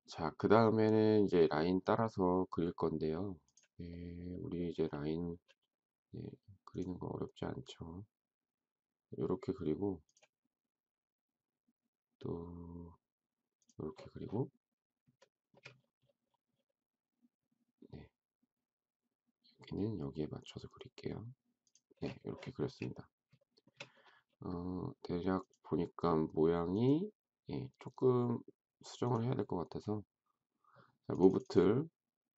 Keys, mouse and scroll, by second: 15.1 shift+middle click, 22.6 space, 23.4 shift+middle click.